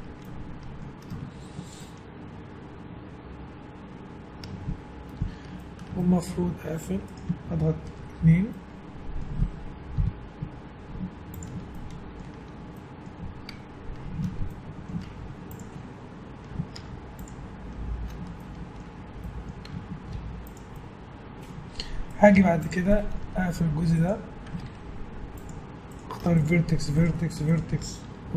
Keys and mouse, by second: 5.7-10.4 middle drag, 7.1 click, 7.9 ctrl+2, 10.0 KP_1, 10.4 z, 11.7-15.2 middle drag, 15.2 Tab, 16.8 ctrl+Tab, 19.7 Tab, 20.1 z, 22.2 right click, 22.3 Tab, 24.7 ctrl+Tab.